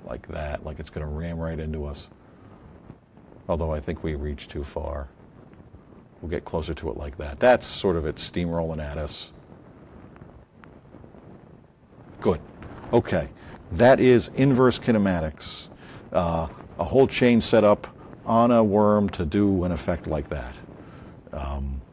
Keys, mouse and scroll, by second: 4.5 scroll up 4, 5.4-6.3 scroll up 4, 21.8 click.